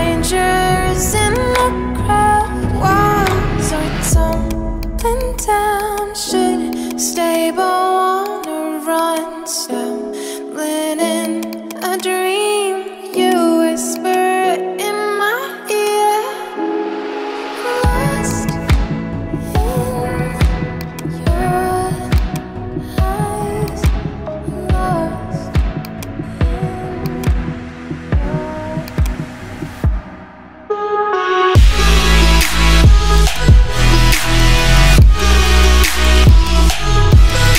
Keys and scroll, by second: 1.6 [, 3.3 ], 3.6 [, 3.8 ], 29.8 alt+BackSpace.